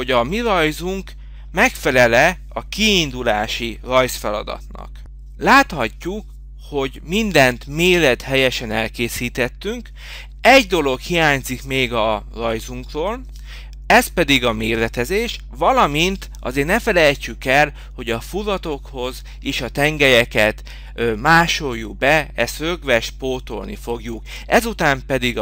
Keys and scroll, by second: 4.5 shift+c, 8.8 Escape, 10.4 ctrl+v, 19.3 m, 20.2 Return.